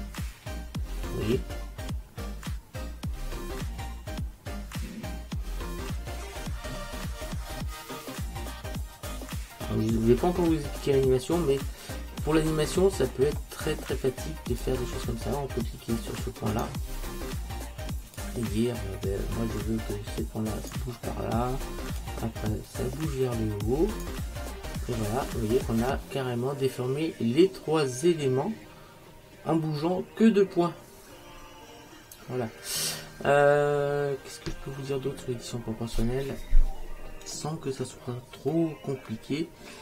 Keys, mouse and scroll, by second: 16.6-18.6 right drag, 18.3 click, 22.1 click, 24.6-27.0 middle drag, 37.8-38.6 scroll up 1, 38.6-39.8 middle drag.